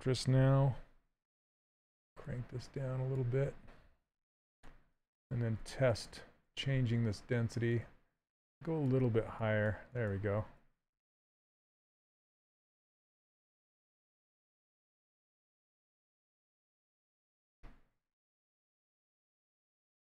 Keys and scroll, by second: 4.3 shift+f, 14.4 s.